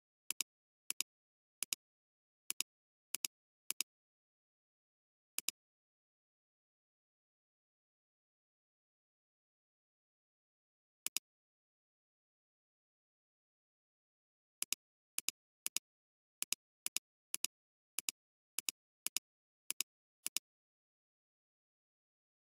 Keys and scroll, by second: 12.2-13.0 typing.